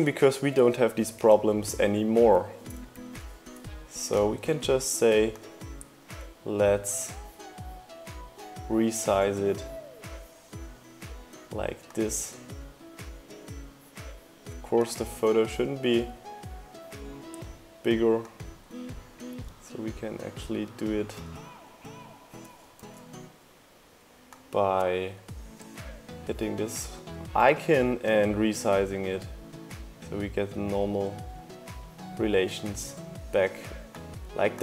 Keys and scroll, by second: 19.6 super+z.